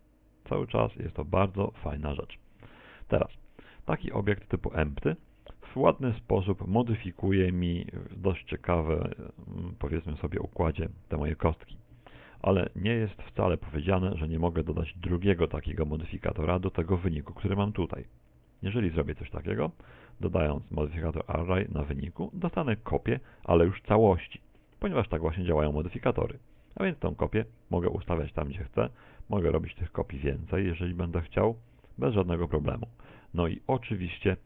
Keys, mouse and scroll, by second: 4.3-4.9 scroll down 2, 4.9 middle click, 5.4 z, 5.9 middle click, 9.0 r, 12.4 ctrl+click, 12.4-13.1 scroll down 2, 13.1 shift+middle click, 13.1-13.6 scroll down 1, 14.0 right click, 14.3 z, 14.7 middle click, 18.1-18.8 scroll down 3, 18.8 shift+middle click, 20.0 click, 24.1 shift+middle click, 24.8 middle click, 27.4 click, 30.5-32.2 scroll down 5, 30.9 shift+middle click, 32.2 click, 33.5 click.